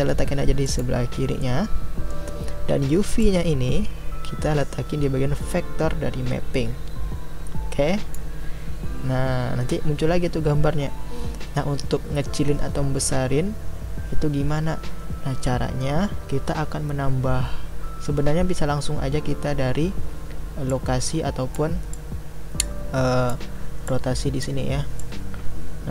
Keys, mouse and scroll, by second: 3.2-8.2 drag, 20.8-25.9 drag.